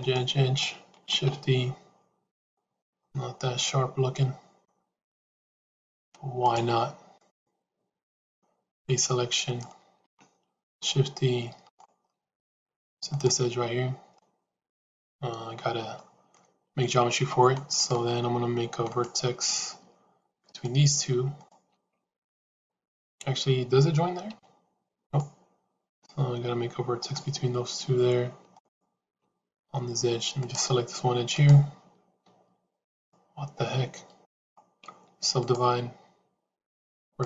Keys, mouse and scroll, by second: 1.0 shift+e, 2.7-4.5 middle drag, 6.2 click, 8.6 click, 9.3 click, 10.5 shift+e, 12.0 middle click, 13.0 click, 14.0 middle click, 14.6 middle click, 15.8 middle click, 17.7 click, 18.8 click, 21.3 shift+click, 22.8 click, 24.1 g, 25.8 click, 28.4 shift+click, 30.3 click, 31.2 click, 32.7 click, 37.1 click.